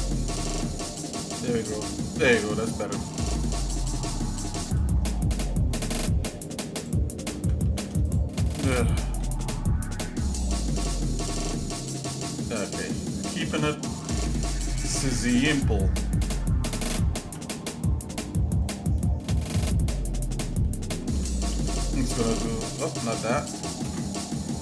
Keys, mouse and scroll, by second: 0.3 ctrl+b, 5.1 shift+middle click, 5.7 shift+middle click, 6.3 shift+click, 7.6 ctrl+z, 8.0 shift+click, 9.0 ctrl+b, 12.6 shift+middle click, 13.6 middle click, 14.1 shift+middle click, 14.8 shift+middle click, 15.6-16.1 scroll up 2, 16.9 ctrl+KP_Add, 17.8-18.4 scroll down 3, 18.7-20.0 shift+middle drag, 21.1 g, 23.8 ctrl+KP_Add.